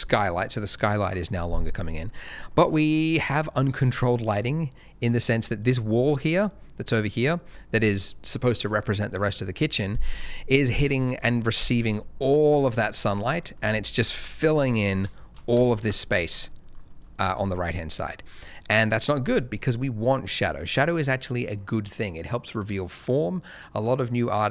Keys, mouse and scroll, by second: 1.9 middle click, 2.5 shift+middle click, 2.8 middle click, 4.4 scroll down 1, 5.0 middle click, 6.0 scroll up 1, 6.9 middle click, 11.2 middle click, 11.4 scroll down 1, 12.0 middle click, 13.1-13.5 scroll up 1, 14.1 KP_0, 14.9 scroll up 1, 15.0 shift+middle click, 15.7 ctrl+shift+a, 16.2 click, 16.6 double click, 20.6 ctrl+shift+a.